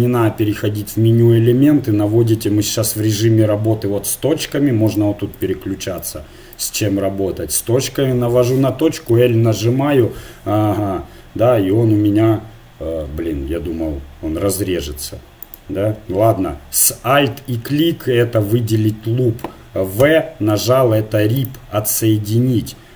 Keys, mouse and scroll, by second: 4.8-8.7 drag, 9.1 l, 10.4-14.5 middle drag, 15.4-17.2 right drag, 17.2-18.8 middle drag, 20.0 v.